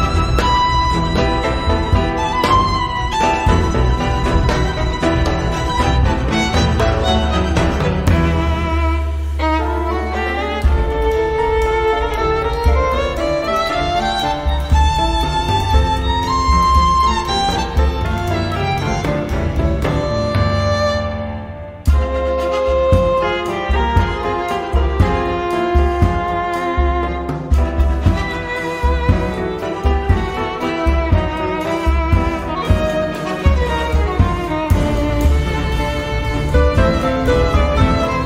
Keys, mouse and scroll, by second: 1.2-3.5 typing, 4.1 click, 5.0 click, 8.3-18.0 drag, 20.1 click, 21.1-21.5 scroll down 1, 22.0-23.6 drag, 24.6 click, 29.3-29.9 scroll down 2, 30.3-30.9 scroll up 1, 32.5 scroll up 1, 33.2 click, 34.1 click, 35.4-37.0 scroll down 2, 37.3 scroll up 2, 38.0 click.